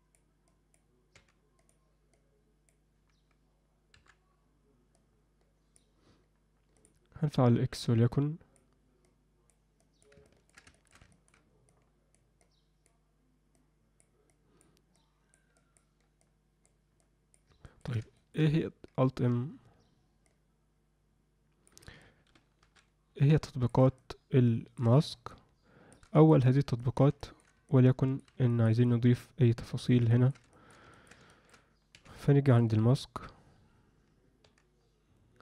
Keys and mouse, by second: 0.5 click, 2.1 click, 4.9 click, 6.7 click, 7.7 click, 9.0 click, 9.8 click, 10.3 ctrl+alt+middle click, 10.7 shift+middle click, 11.1 ctrl+alt+middle click, 11.7 click, 12.4 click, 13.5 click, 14.3 click, 14.9 click, 15.5 click, 16.3 click, 17.0 click, 17.6 ctrl+middle click, 18.1 shift+middle click, 20.3-21.7 drag, 22.7 alt+m, 23.5 alt+shift+middle click, 23.9 middle click, 25.3 shift+click, 26.3 alt+shift+middle click, 26.8 ctrl+alt+middle click, 27.2 alt+shift+middle click, 27.7 alt+middle click, 28.5 alt+middle click, 28.8-29.9 middle drag, 30.1 ctrl+alt+middle click, 30.5 alt+shift+middle click, 30.9 ctrl+middle click, 31.3 alt+shift+middle click, 31.9 f, 32.6 m, 34.4 f.